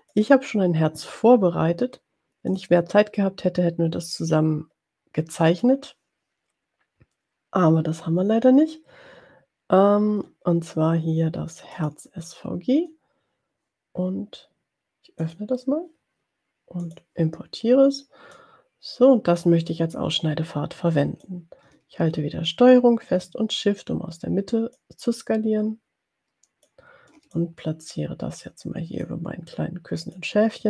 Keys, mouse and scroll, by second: 0.1 click, 2.8 click, 5.4 click, 12.0 click, 15.2 click, 16.8 click, 18.4-21.4 drag, 24.7-26.8 ctrl+shift+drag, 27.6-29.2 ctrl+shift+drag, 29.7 click.